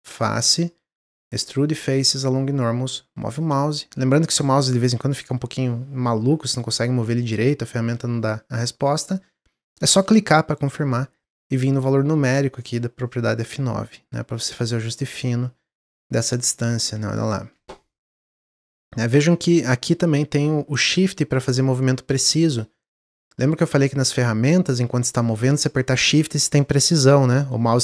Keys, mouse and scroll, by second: 11.1-14.3 drag, 14.9-16.6 middle drag, 16.6-18.0 shift+drag, 18.0-19.6 middle drag, 19.6-22.7 shift+drag.